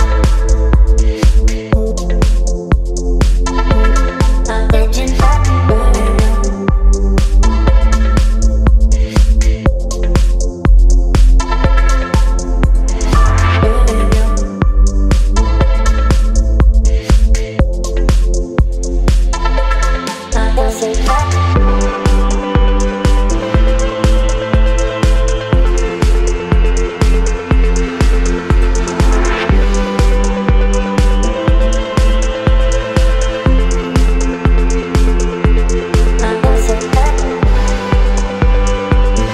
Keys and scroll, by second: 3.6 space, 4.9 space, 5.6 space, 19.7 space, 24.9 t, 29.7 a, 32.0 v, 36.0 space, 38.0 space.